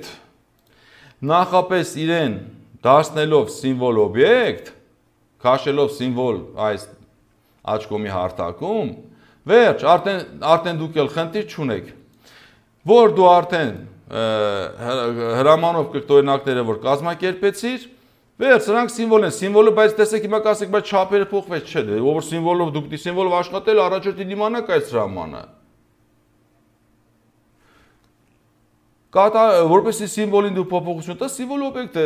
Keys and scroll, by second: 21.4 ctrl+z.